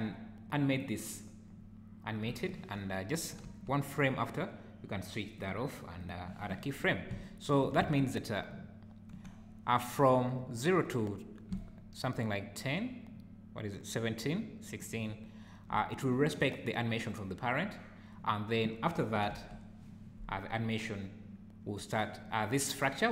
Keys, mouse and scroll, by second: 0.7 click, 3.5 Right, 5.4 click, 6.0 click, 7.2 shift+right click, 7.8 space, 9.2 Escape, 9.5-10.1 scroll down 2, 11.6 shift+right click, 19.3 Right.